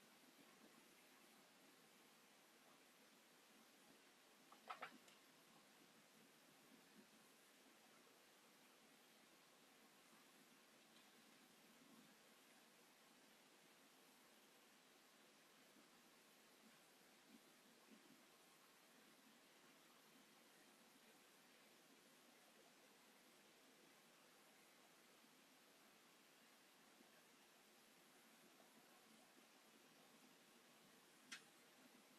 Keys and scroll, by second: 0.3 Delete, 1.6 Delete, 3.2 Delete, 15.0 space, 19.3 s, 27.4 space, 27.9 Delete.